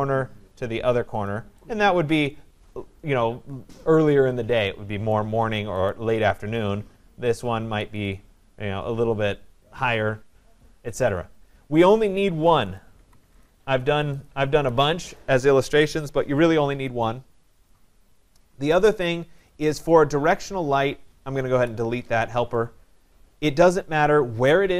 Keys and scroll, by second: 11.9 Delete, 21.1 Delete.